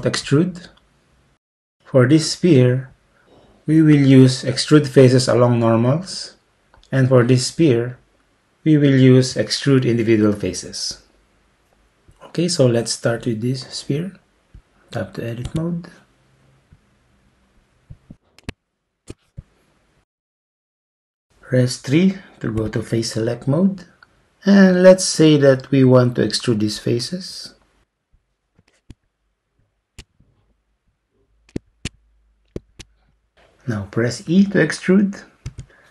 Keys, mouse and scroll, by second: 15.6 Tab, 22.6 3, 28.1 click, 29.6 shift+click, 31.7 shift+click, 35.5 e.